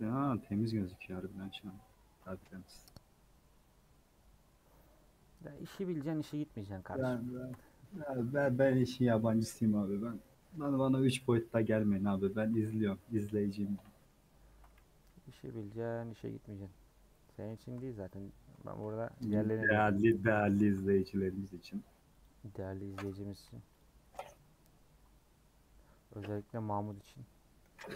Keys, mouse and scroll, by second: 6.5 scroll down 2, 6.8-8.4 middle drag, 8.4 /, 8.7 Tab, 9.1 h, 9.6 scroll up 1, 9.9 scroll down 1, 10.2 middle click, 10.7 click, 11.3 /, 11.6 middle click, 11.9 Tab, 12.1 3, 12.4 click, 12.7 x, 12.9-15.0 middle drag, 15.0 /, 15.6 middle click, 16.0 scroll up 1, 16.6 2, 17.2 middle click, 17.9 scroll up 1, 18.2-20.6 middle drag, 20.6 ctrl+r, 23.6 3, 23.8 click, 24.2-26.9 middle drag, 26.9 click.